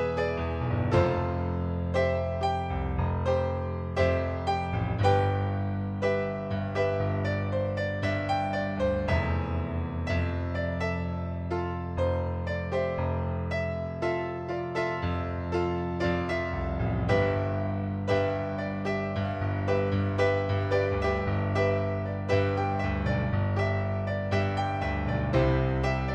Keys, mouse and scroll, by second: 0.8 click, 1.9 shift+click, 3.8 click, 6.0 click, 7.0 click, 8.6 right click, 10.3 click, 11.1 middle click, 13.2 shift+click, 15.8 click, 19.5 click, 20.2 middle click, 20.6 click, 21.3 ctrl+d, 22.2 click, 24.3 shift+click.